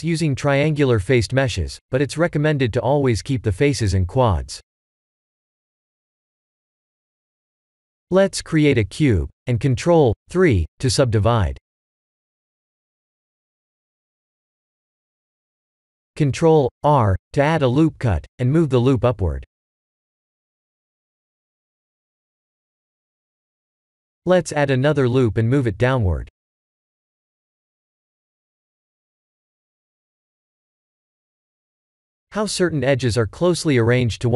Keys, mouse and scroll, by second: 0.1 h, 8.5 shift+a, 11.1-11.6 scroll down 6, 11.7 shift+middle click, 12.5-13.4 scroll up 6, 13.4 ctrl+3, 13.9 shift+middle click, 14.0 shift+middle click, 14.6 scroll up 2, 15.0 Tab, 16.2 ctrl+r, 21.8 middle click, 22.0 middle click, 23.7 ctrl+r, 26.0 middle click, 26.7 middle click, 26.8 3, 27.1 click, 27.5 s, 29.2 middle click, 29.7 middle click, 29.9 scroll down 2, 30.3 Tab, 31.1 right click, 32.1 middle click, 33.7 middle click, 33.8 Tab.